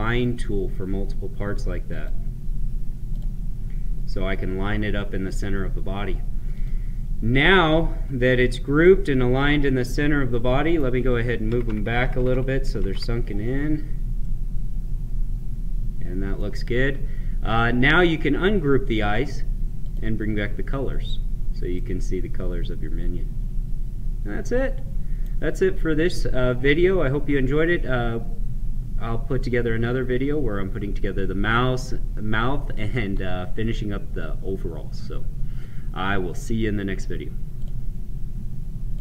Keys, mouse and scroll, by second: 6.5 click, 8.8-11.5 right drag, 14.2-18.7 right drag, 18.8 click, 21.7-27.8 right drag, 37.5 click.